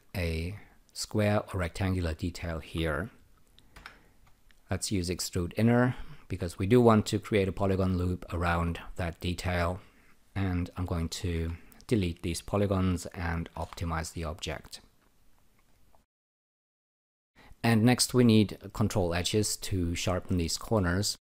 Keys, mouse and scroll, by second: 0.6 alt+click, 4.7-6.4 drag, 11.3 Delete, 13.4 n, 13.6 n, 15.0 alt+right click, 15.9 alt+click, 17.3 alt+right click, 20.3 alt+middle click, 21.2 alt+right click.